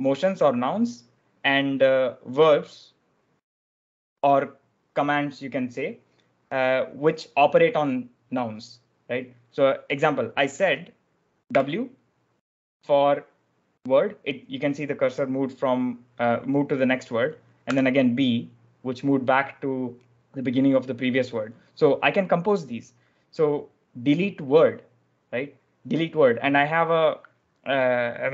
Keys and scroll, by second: 11.4 w, 17.6 b.